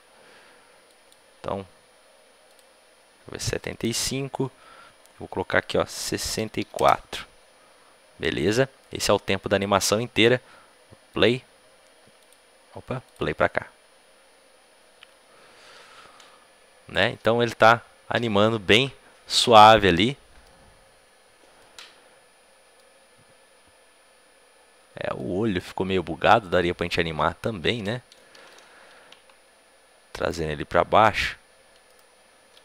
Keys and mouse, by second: 0.8-6.7 drag, 0.8 a, 8.9-19.8 drag, 19.8-29.7 middle drag, 30.1-32.6 right drag, 32.3 Tab.